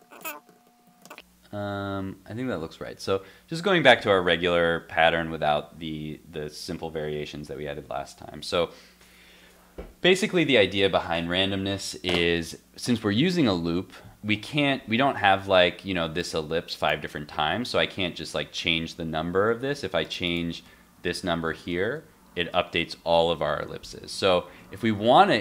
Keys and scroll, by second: 0.2 super+s, 1.1 super+s, 14.6 super+Tab, 19.4 super+Tab, 21.3 super+s, 21.6 super+Tab, 21.8 super+r, 24.0 super+Tab, 24.5 super+z, 24.9 super+s.